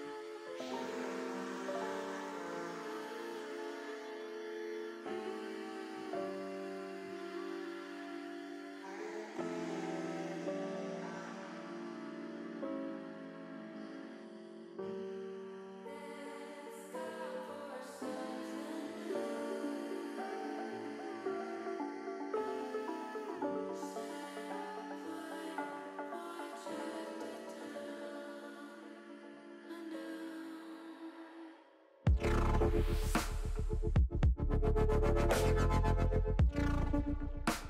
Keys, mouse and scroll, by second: 1.4 click, 1.8-2.9 middle drag, 3.9-5.3 middle drag, 5.8 middle click, 8.3 e, 10.1 y, 13.0 click, 13.5 middle click, 15.1 middle click, 16.0 middle click, 18.5 s, 20.5 click, 20.8 ctrl+z, 22.1 e, 22.7 s, 25.0 click, 25.5 middle click, 26.5 click, 27.4-30.1 middle drag, 31.4 middle click, 32.8 middle click, 33.1 middle click, 33.7 middle click, 34.0 middle click, 35.6 shift+middle click, 36.3-37.6 middle drag.